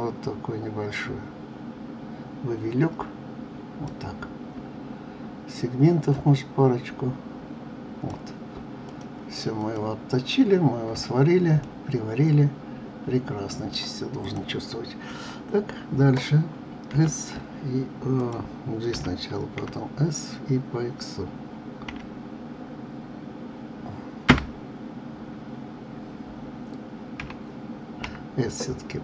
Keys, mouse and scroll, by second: 6.1-8.9 drag, 9.6 click, 11.1-11.6 scroll down 2, 11.6-14.2 middle drag, 14.2 click, 16.9 z, 18.9 g, 27.2 s.